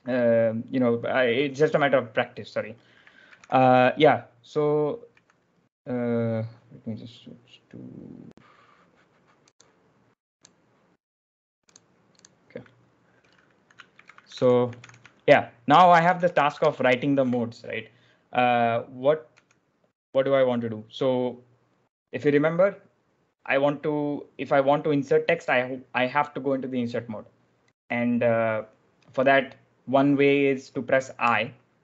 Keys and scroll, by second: 2.9-3.8 typing, 5.0 typing, 13.8 ctrl+u, 13.9-17.1 typing, 19.3 j, 31.1 i.